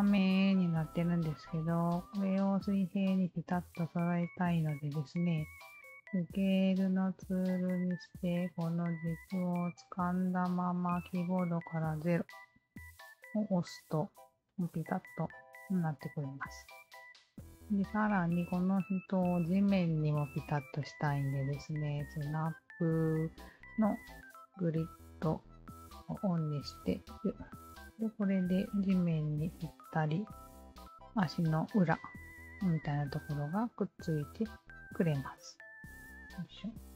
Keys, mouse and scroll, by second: 0.8 1, 1.3 click, 2.1-3.9 drag, 4.8 r, 5.6 alt+click, 7.9-12.6 alt+drag, 11.9 0, 13.5-15.9 alt+drag, 16.2 alt+click, 17.1 q, 17.3 alt+click, 18.1 alt+click, 20.2 click, 21.1 alt+click, 23.0 alt+click, 23.7 alt+middle click, 24.0 alt+click, 25.2 w, 25.9 alt+middle click, 26.9 alt+click, 27.6 alt+click, 28.9 alt+right click, 29.5 alt+middle click, 31.2 alt+click, 32.0 alt+middle click, 32.4 alt+click, 33.0 alt+middle click, 33.3 alt+click, 34.5 alt+click, 35.5 alt+click, 36.5 alt+click, 36.9 middle click.